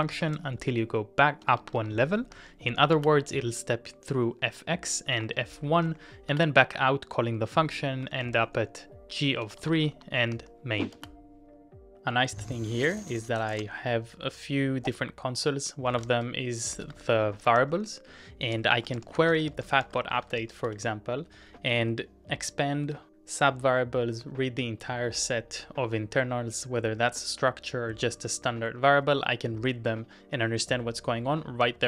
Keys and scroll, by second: 11.4 shift+Return, 16.0 ctrl+w, 16.1-21.9 typing.